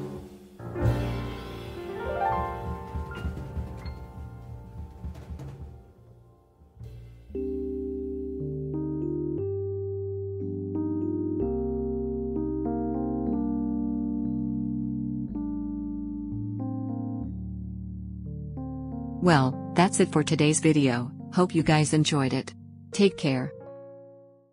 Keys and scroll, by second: 0.2 Escape, 14.7 Escape, 17.2 Escape, 20.2 Escape.